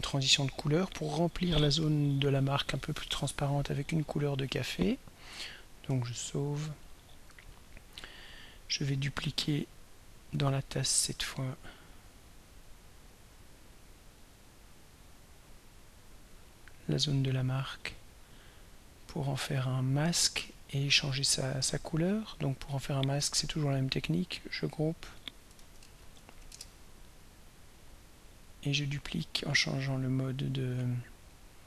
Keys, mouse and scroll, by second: 6.1 ctrl+s, 11.2-11.6 scroll up 2, 15.3 click, 16.3 click, 23.6 click, 24.7 click, 25.6 ctrl+a, 25.8 ctrl+m, 26.0 ctrl+a, 26.2 ctrl+r, 26.3 ctrl+k, 26.5 ctrl+Return, 27.8 click, 29.1 click, 30.6 click.